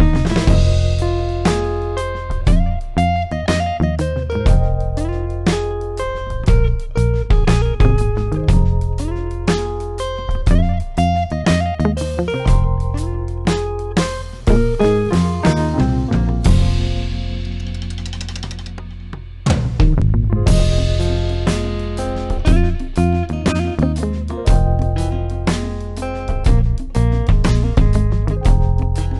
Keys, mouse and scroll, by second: 0.2-1.4 drag, 3.3-3.6 drag, 9.7 click, 12.3-13.2 click, 21.6 click.